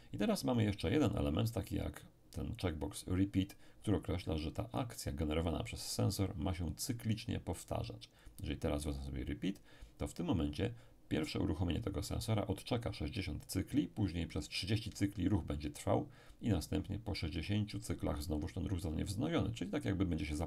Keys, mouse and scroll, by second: 8.2 click.